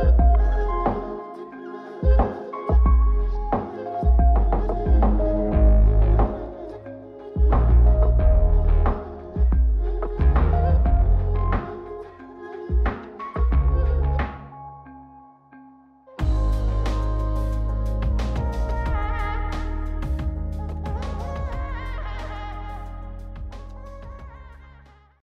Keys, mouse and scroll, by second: 2.1 click, 4.1 click, 7.9 click, 9.8 click, 10.6 click, 11.8-15.0 drag, 15.2-17.6 drag, 18.2-24.4 drag.